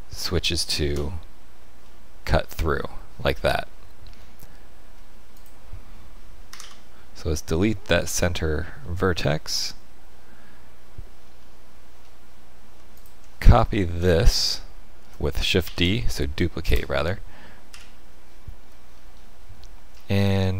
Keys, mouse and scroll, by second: 1.8 middle click, 4.2 middle click, 5.3 click, 6.5 Delete, 7.5 middle click, 11.1 scroll down 3, 12.0-12.5 scroll up 1, 12.9 alt+click, 13.7 shift+middle click, 14.2 middle click, 15.6 shift+d, 17.7 KP_1, 18.6-19.6 scroll down 7, 19.7 scroll down 1, 19.9-20.5 scroll up 4.